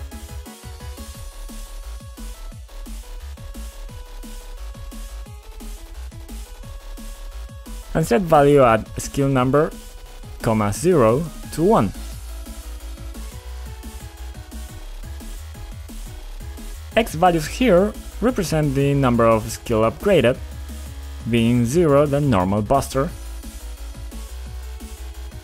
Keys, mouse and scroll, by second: 0.9 click, 1.6 7, 2.8 click, 4.1 click, 4.7 2, 4.9 Return, 6.5 click, 8.5 click, 10.1 click, 10.1 click, 14.9 click, 17.9 click, 18.0 click, 19.2 click, 22.8 click, 23.8 1, 25.0 Return.